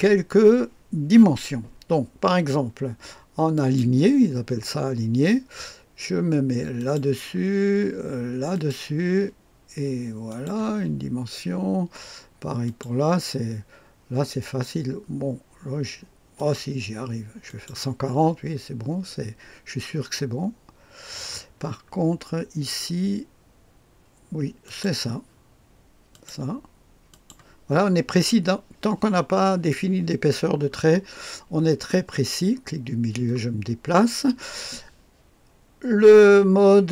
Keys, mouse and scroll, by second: 3.5 click, 6.8 click, 8.5 click, 10.3 click, 12.6 click, 16.4 click, 17.5 click, 18.1 click, 21.6-24.6 scroll up 1, 24.6 click, 26.1-28.0 drag, 30.4-32.2 scroll down 1, 32.2-33.3 middle drag.